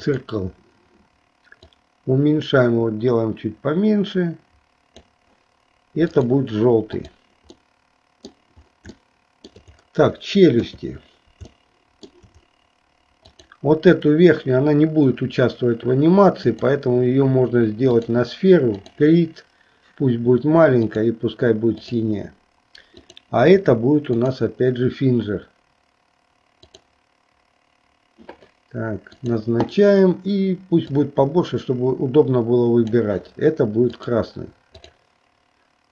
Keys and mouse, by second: 0.1 click, 1.6-5.2 drag, 7.0 click, 7.7 middle click, 9.1 shift+middle click, 10.7 KP_3, 11.7 shift+middle click, 13.4 click, 16.5-18.2 drag, 18.9 click, 22.1 click, 23.0 click, 24.1-27.0 drag, 29.1 click, 30.9-33.1 drag, 34.1 click, 35.0 click.